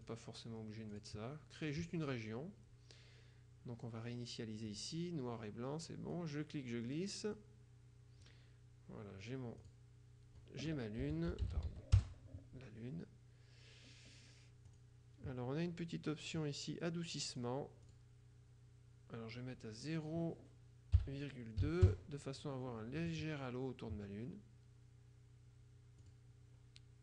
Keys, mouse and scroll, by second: 0.2 click, 1.1 click, 4.8 click, 6.3-7.9 drag, 9.7 click, 10.9-12.3 typing, 14.8 click, 16.1-16.7 scroll down 1, 17.4 click, 21.1 ,, 21.7 KP_2, 21.9 KP_Enter, 26.1 click.